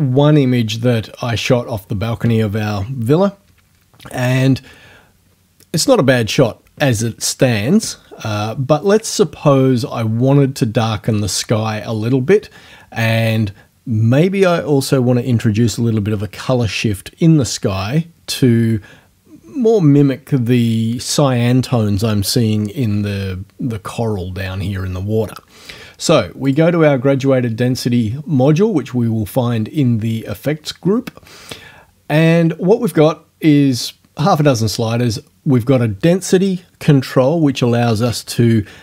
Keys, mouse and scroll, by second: 26.5 click.